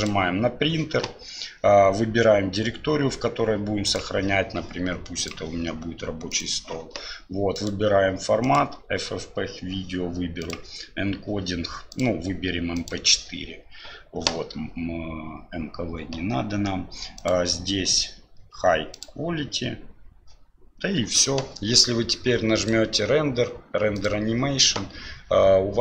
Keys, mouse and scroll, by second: 0.0 click, 7.6-8.7 drag, 10.4 click, 11.9-13.0 drag, 17.2-19.1 drag, 22.6-25.8 drag.